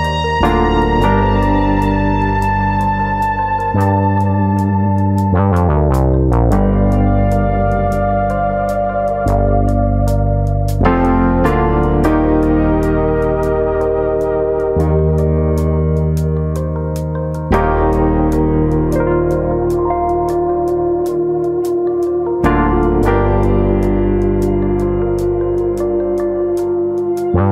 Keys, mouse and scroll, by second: 0.4 r, 0.9 click, 1.4 click, 2.9 e, 3.6 click, 4.0 click, 5.3 r, 6.1 click, 6.5 e, 7.1 click, 7.6 click, 9.0 click, 10.4 click, 12.3 e, 13.2 click, 13.3 middle click, 13.9 shift+middle click, 14.3-14.6 scroll down 1, 14.6 middle click, 14.9 shift+middle click, 16.0 click, 16.4 middle click, 17.0 a, 17.7 click, 19.7 middle click, 20.2 shift+middle click, 20.4 middle click, 20.9 middle click, 21.2 shift+middle click, 21.9-22.2 scroll up 2, 22.2 middle click, 23.7 middle click, 25.1 click, 26.2 2, 27.1 click.